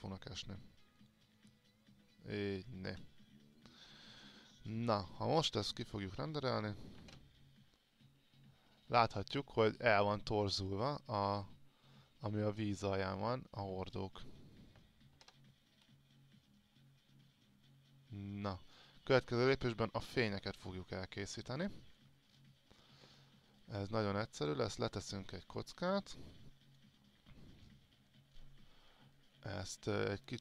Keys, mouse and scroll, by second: 4.0 click, 4.9-6.0 scroll up 2, 6.0 click, 13.7-14.4 scroll up 1, 18.9-19.9 scroll down 1, 20.2-22.2 alt+drag, 22.4-23.6 scroll down 1, 23.6 click, 25.3 alt+click, 26.3-27.6 drag, 27.9-28.6 scroll up 1, 28.6-29.3 scroll down 1.